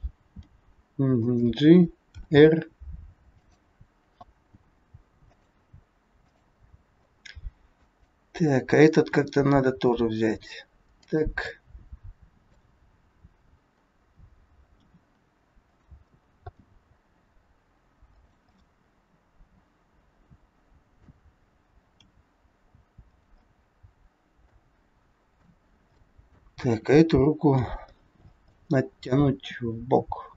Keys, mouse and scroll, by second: 0.3 g, 2.2 r, 4.6 g, 6.1 click, 7.0 middle click, 7.0 scroll up 1, 8.1 middle click, 9.1 r, 11.5 middle click, 12.8 scroll up 1, 13.6 scroll down 1, 14.7 r, 16.5 g, 18.6 middle click, 23.6 middle click, 25.2 click, 26.0 middle click, 26.6 r, 28.0-28.5 scroll down 5, 28.5 middle click, 29.4 r.